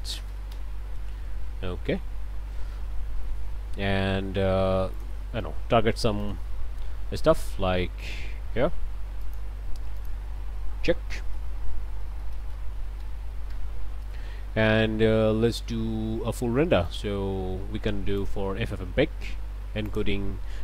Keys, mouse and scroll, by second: 0.1 KP_0, 0.5 KP_Enter, 2.5 scroll down 2, 3.8 scroll down 2, 4.9 click, 6.2 click, 9.2 click, 10.0 click, 11.1-12.5 typing, 13.0 Return, 14.7-15.4 scroll down 4, 16.9 click, 18.2 click, 18.9-19.2 scroll down 1, 19.9 click, 20.3 scroll down 1.